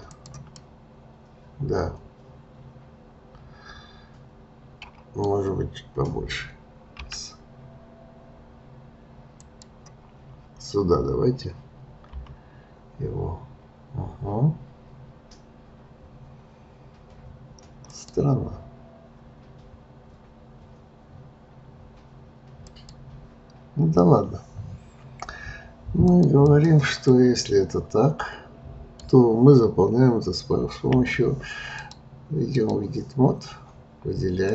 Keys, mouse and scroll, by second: 0.6-3.6 middle drag, 7.0 s, 17.8 click, 22.6 click, 26.0 click, 27.1-30.1 middle drag, 31.0 f, 31.8-34.5 drag.